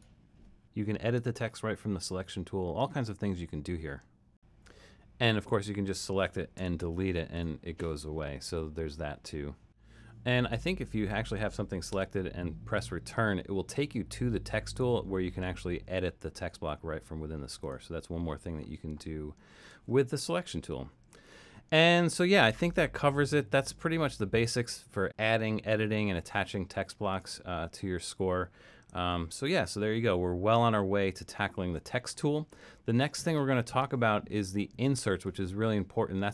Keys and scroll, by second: 6.6 BackSpace, 11.9 Return, 29.1 super+-, 30.0 super+-, 31.1 super+-.